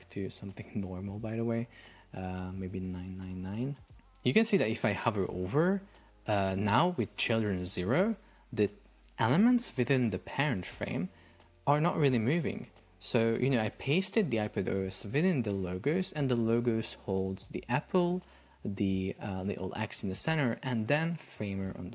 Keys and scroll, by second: 12.4 Escape.